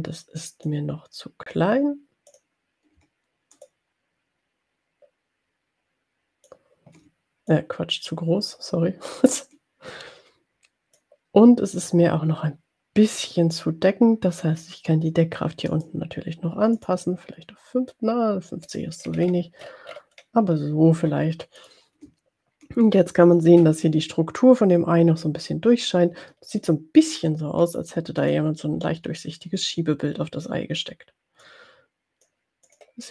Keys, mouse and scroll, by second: 2.3 click, 3.9-6.9 ctrl+drag, 7.5-11.2 drag, 15.7 right click, 16.7 click, 18.7 click, 19.3-20.5 scroll up 4, 20.6 scroll down 2, 21.7 click, 26.6-27.0 ctrl+scroll down 2, 28.1 click, 31.4 click, 32.9 click.